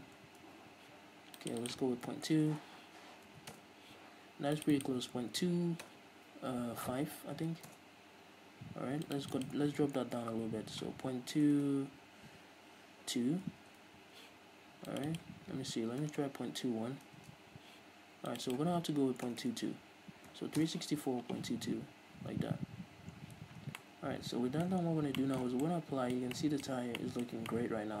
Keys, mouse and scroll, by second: 0.8 Return, 2.8 BackSpace, 3.9 Return, 8.1 Return, 11.8 BackSpace, 14.0 Return, 16.4 BackSpace, 17.6 Return, 19.7 BackSpace, 21.0 Return, 23.2-23.6 scroll down 2, 23.6 z, 23.8 scroll down 2, 24.0-28.0 middle drag, 25.1-25.9 scroll down 4, 26.9-27.2 scroll up 2, 27.7-28.0 scroll down 2.